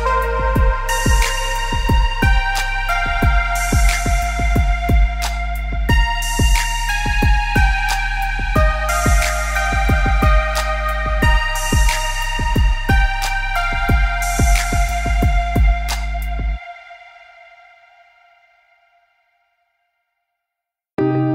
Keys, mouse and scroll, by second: 0.0 middle click, 0.4-1.2 scroll down 4, 0.7 middle click, 1.7 shift+a, 3.2 middle click, 3.9 KP_1, 5.2 g, 7.0 g, 10.0 middle click, 11.0 g, 12.4 middle click, 13.1 scroll down 1, 13.3 middle click, 13.9 scroll down 2, 14.2 middle click, 14.9 middle click, 15.2 middle click, 15.7 s, 16.7 middle click, 17.2 Tab, 17.6 click, 18.2 middle click, 18.7 middle click, 19.2 middle click, 20.1 click, 20.5 click, 20.8 click.